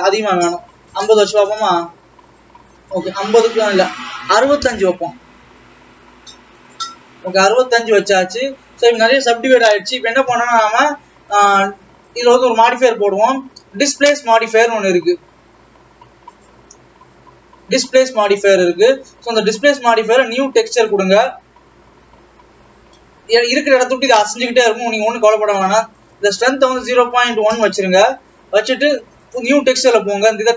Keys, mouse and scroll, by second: 4.0-7.1 drag, 8.6 Tab, 9.2-9.5 scroll up 2, 9.5-10.4 scroll down 3, 11.7 click, 21.0-21.7 drag, 23.2-26.1 middle drag, 26.1-28.9 drag, 29.3-30.5 drag.